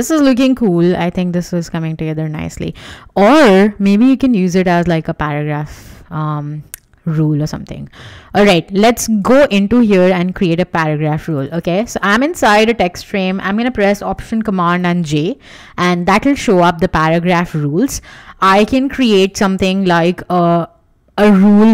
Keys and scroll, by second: 14.6 alt+super+j.